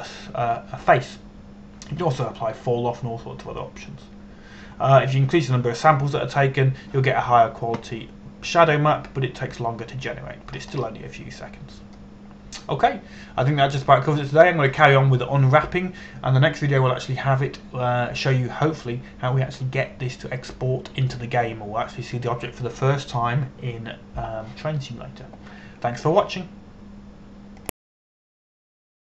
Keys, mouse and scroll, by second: 12.2-13.0 scroll up 1, 13.0-15.1 scroll down 1.